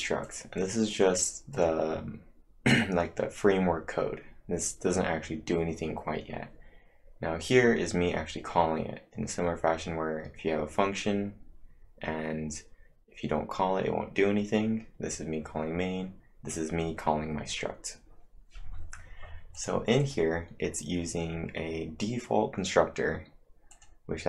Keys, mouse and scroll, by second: 0.0 click, 0.3 click, 0.6 click, 1.0 click, 1.6-3.8 click, 3.6-4.3 typing, 19.3-20.1 typing, 19.6 click, 20.0 click, 23.5-24.2 typing, 23.7 click.